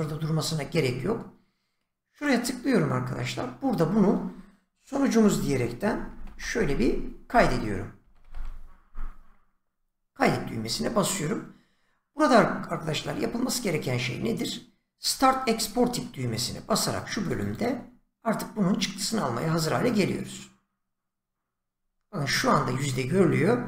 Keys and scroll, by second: 5.2-8.8 typing, 15.5 <, 17.5 <.